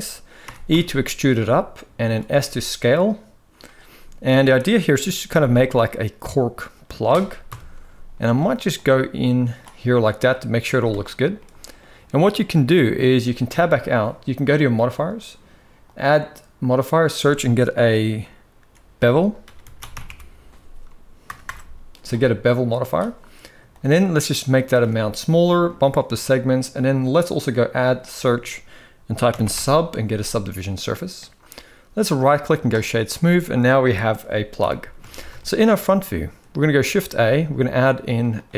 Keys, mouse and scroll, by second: 0.4 e, 3.3 s, 3.6 middle click, 4.0 a, 4.6 g, 7.2 KP_1, 7.5 z, 8.9 click, 10.0 middle click, 10.4 z, 11.2 middle click, 13.3 Tab, 15.6-22.4 drag, 21.2 BackSpace, 23.4-24.5 shift+drag, 25.4 click, 27.1-30.5 drag, 31.9-32.6 right drag, 32.8-34.3 middle drag, 34.3 KP_1, 34.8 alt+a, 35.1-35.4 shift+middle drag, 36.6 shift+a.